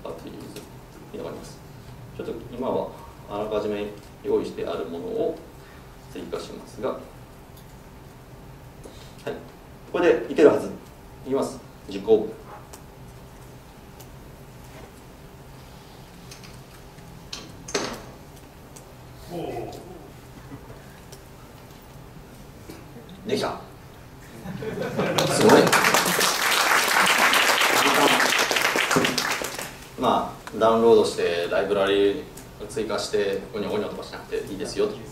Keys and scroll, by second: 8.3 super+v, 11.7 ctrl+shift+F10.